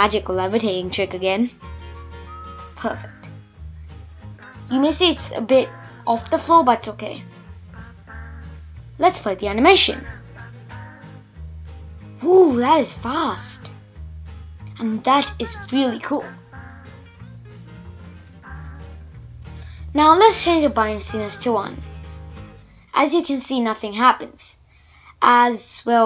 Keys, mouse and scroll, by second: 1.5 middle click, 1.9 Tab, 2.3-4.0 middle drag, 4.0 click, 4.4-5.6 middle drag, 5.6 shift+Left, 5.9 space, 6.9 scroll up 1, 7.1-9.9 middle drag, 9.9-12.3 scroll down 1, 12.3-12.9 scroll down 1, 15.6 shift+Left, 16.0 space, 18.2-19.6 drag, 19.6 shift+Left, 19.9 space, 21.0 shift+Left, 21.9 shift+Left, 22.6 shift+Left, 23.2 Left, 23.9 Left, 24.4 space, 25.3 click.